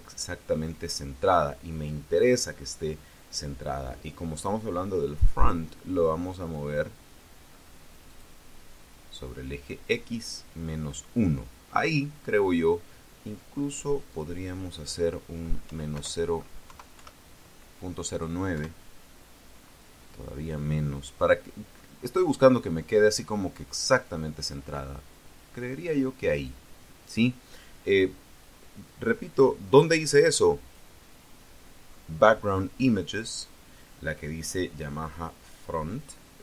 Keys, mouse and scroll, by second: 7.9 click, 13.9 click, 15.5 End, 15.8 BackSpace, 16.5 0, 16.8 KP_9, 18.4 KP_Enter, 24.6 scroll up 1, 25.9-26.5 scroll up 2, 29.5-30.8 drag.